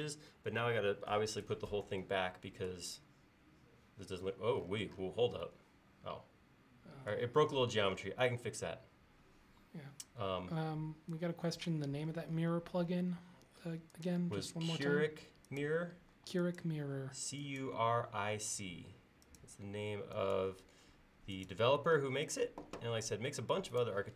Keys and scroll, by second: 13.2 l, 16.1 e.